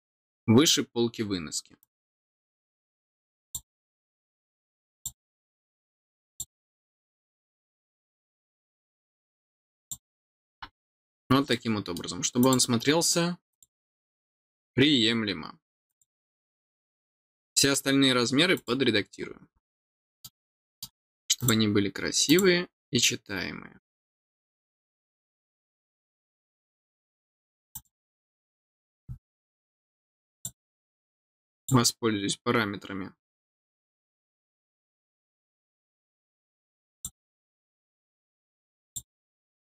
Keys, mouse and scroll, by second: 1.8 click, 3.4 click, 4.9 click, 6.2 click, 9.8 click, 11.1 scroll down 1, 11.5 middle click, 12.4 click, 13.5 click, 15.8 click, 17.4 middle click, 18.5 click, 19.8 middle click, 20.5 middle click, 21.3 click, 22.2 click, 24.1 scroll down 1, 27.7 click, 30.3 click, 31.5 click, 36.9 click, 38.8 click.